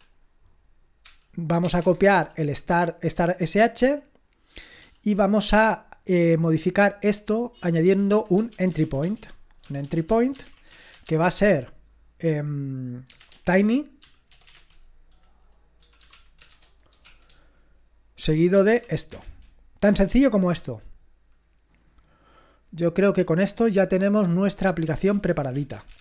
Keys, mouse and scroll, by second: 1.0 o, 1.8 Escape, 2.1 j, 4.6 typing, 7.9-11.5 typing, 13.2-14.5 typing, 15.5-18.8 typing, 19.1 Escape, 25.1 Escape, 25.5-26.0 typing.